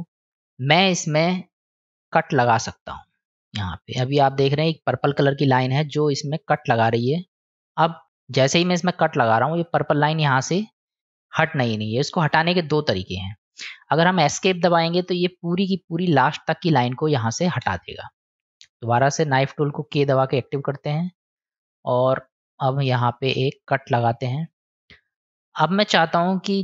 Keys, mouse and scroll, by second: 20.4 k.